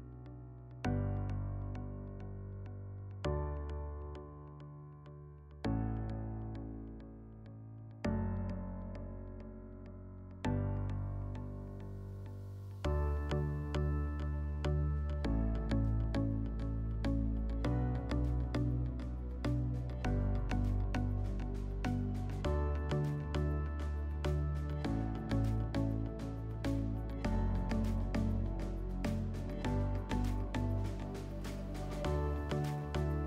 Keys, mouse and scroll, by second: 24.2 m, 33.1 click.